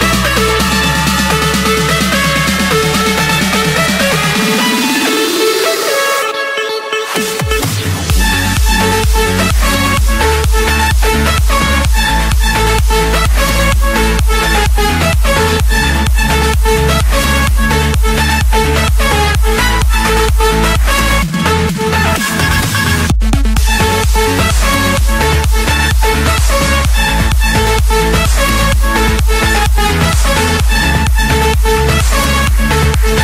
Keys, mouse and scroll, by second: 0.1 Return, 0.7 Escape, 1.9 click, 2.5 Return, 3.4 Return, 4.1 scroll down 1, 4.2 scroll, 5.0 Escape, 6.1 click, 7.0 click, 8.1-8.8 scroll down 7, 10.0 click, 10.9 click, 12.3 click, 12.9 click, 13.5 click, 14.1 click, 14.3-14.9 scroll down 6, 15.2 click, 15.9 click, 16.2-16.5 scroll up 4, 16.5-16.9 scroll, 18.4 click, 20.2 Escape, 20.2 click, 21.1 Escape.